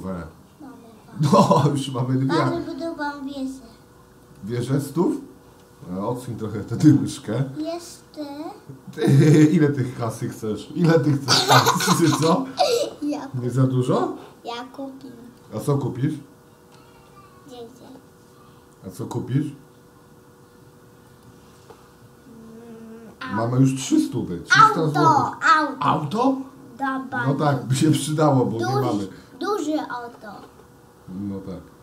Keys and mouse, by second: 8.0 shift+d, 15.3 click, 16.8 shift+d, 29.5 shift+d.